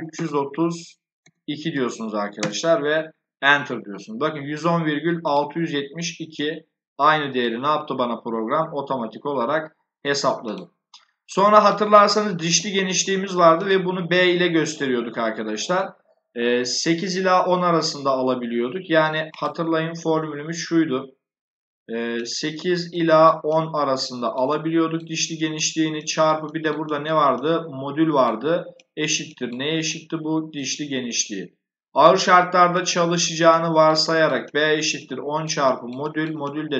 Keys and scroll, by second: 0.0-1.1 typing, 2.3 Return, 12.4 b.